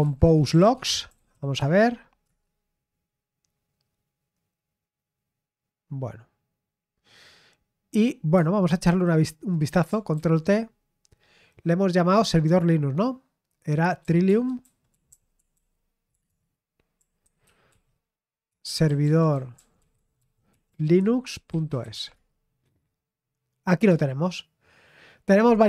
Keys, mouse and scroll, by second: 0.0-1.7 typing, 2.2 Return, 8.8 super+8, 10.1 ctrl+t, 13.9-22.9 typing.